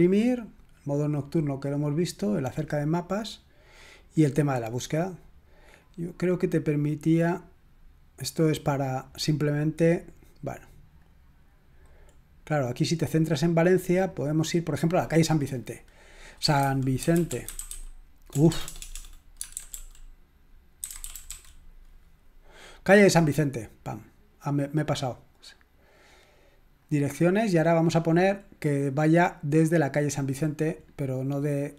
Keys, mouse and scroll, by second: 2.3 click, 3.6 click, 5.8 click, 7.2 click, 11.0-12.3 drag, 12.3-13.5 scroll up 1, 14.2-15.1 drag, 15.9 click, 16.2 click, 16.4-21.8 typing, 23.2 click, 26.8 click, 28.2-29.8 scroll down 1, 29.8 click, 30.9-31.7 scroll down 1.